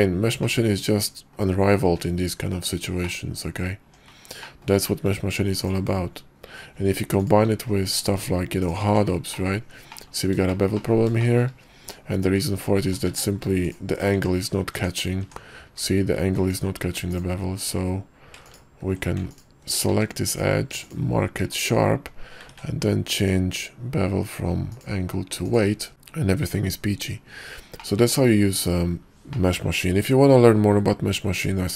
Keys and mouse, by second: 0.7 middle click, 1.4 click, 1.9 `, 3.3 click, 3.9 Tab, 4.5 click, 4.9 q, 8.0 q, 9.5 middle click, 10.0 middle drag, 10.6 middle click, 10.9 middle click, 11.3 shift+middle drag, 11.9 Tab, 12.9 Tab, 13.2 q, 14.3 Tab, 14.9 Tab, 15.3 Tab, 16.6 alt+click, 17.2 alt+click, 18.6 ctrl+click, 19.4 alt+click, 20.0 q, 20.8 q, 21.5 Tab, 22.6 ctrl+`, 25.9-26.5 drag, 26.5-27.1 middle drag, 27.1-27.5 drag, 27.9 click, 29.5 click.